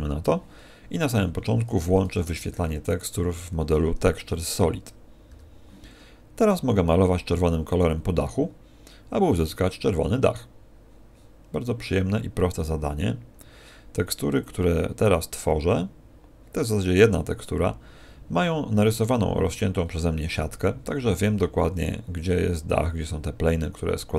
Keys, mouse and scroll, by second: 2.8 click, 5.2 n, 6.4 click.